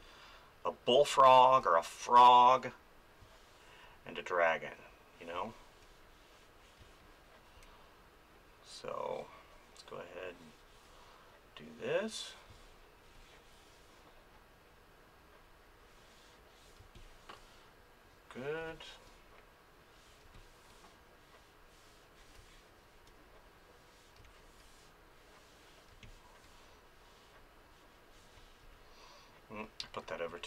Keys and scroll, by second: 3.2 space, 5.3 space, 12.5 space, 16.8 space, 18.6 space, 20.2 space, 22.4 space, 24.2 space, 25.9 space, 28.3 space, 29.9 ctrl+z.